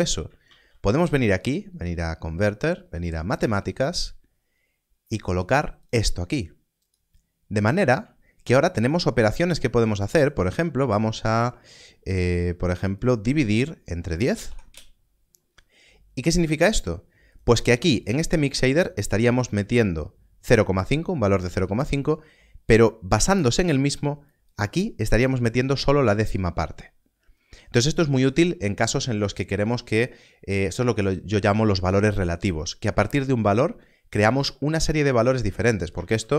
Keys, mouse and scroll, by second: 0.2 click, 0.4 shift+a, 3.3 shift+a, 5.8 click, 8.4 shift+click, 9.8 click, 12.9 click, 14.3 click, 14.4 1, 14.6 Return, 17.3 click, 24.2 click, 35.8 click, 36.0 shift+d.